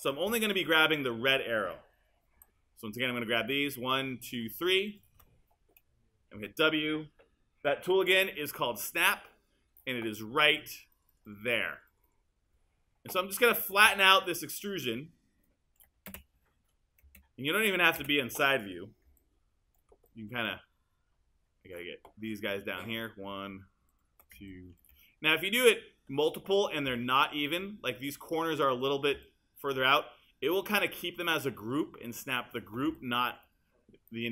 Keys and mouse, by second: 2.4 q, 6.4 w.